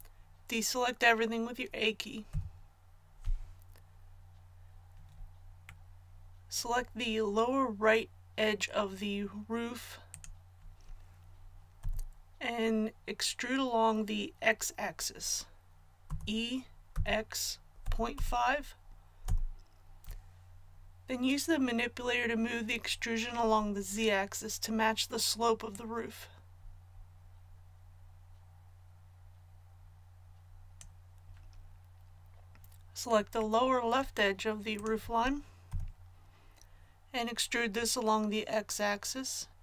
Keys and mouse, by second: 2.3 a, 11.8 KP_1, 16.0 e, 25.7-35.6 drag, 35.6 KP_1, 39.5 ctrl+z.